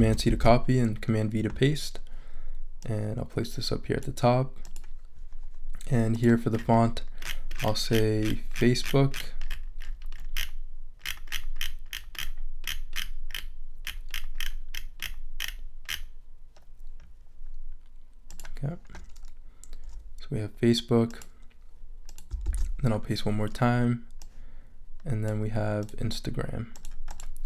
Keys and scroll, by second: 0.0 super+c, 0.3 super+v, 22.4 super+v.